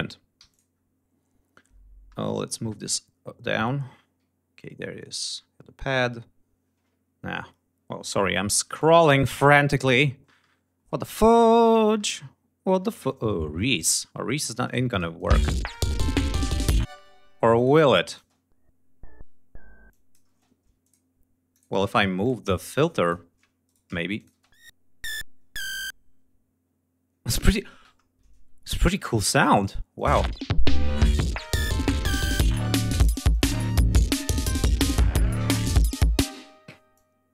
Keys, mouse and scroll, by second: 0.0 g, 0.2 click, 0.6-1.1 scroll down 4, 1.8 ctrl+middle click, 2.7 scroll up 2, 4.0-4.5 ctrl+scroll up 4, 4.8 scroll down 2, 5.3 scroll up 2, 6.4-6.8 scroll up 2, 7.1 scroll down 2, 7.4 scroll up 2, 8.4 click, 9.9 middle click, 10.7 ctrl+scroll up 2, 11.2 ctrl+click, 11.6 ctrl+click, 12.6 ctrl+scroll up 2, 12.7 ctrl+scroll down 2, 13.5-14.1 ctrl+scroll up 4, 14.3 ctrl+click, 15.0 space, 15.2 ctrl+scroll up 2, 15.6 ctrl+scroll down 2, 16.6 space, 17.2 click, 17.7 click, 17.9 space, 19.6 click, 20.0 space, 20.3 d, 20.5 click, 21.2 click, 21.9 click, 22.4 click, 23.3 shift+right click, 23.8 shift+click, 24.0 shift+space, 27.4 space, 27.7 ctrl+scroll down 2, 29.2 click, 29.6 click, 29.8 space, 31.6 g, 31.9 ctrl+scroll down 2, 33.0 click, 36.0 space, 36.6 click.